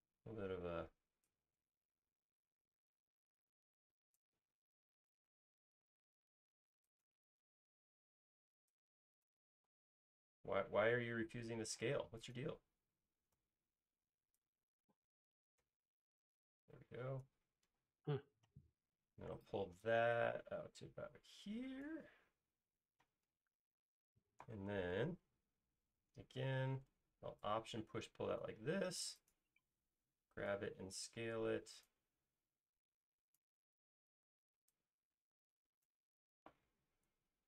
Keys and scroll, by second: 10.1 space, 13.4 s, 18.0 space, 20.6 p, 28.8 alt+space, 30.5 s.